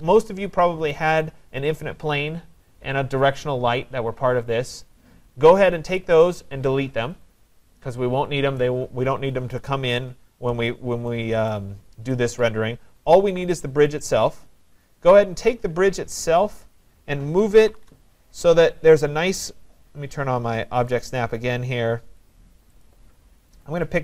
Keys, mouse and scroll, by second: 11.5 right click, 14.8 click, 15.7 middle click, 15.8-16.7 scroll, 17.2-18.2 typing, 21.0 click, 22.9 click.